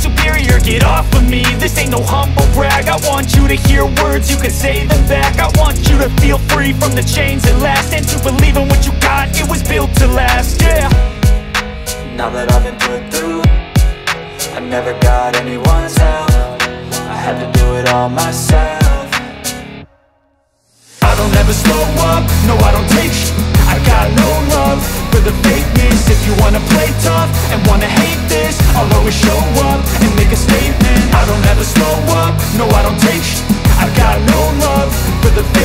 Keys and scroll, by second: 18.5 ctrl+z, 19.9 ctrl+z, 22.1 space, 29.3 F3, 29.8 Escape, 31.1 F2.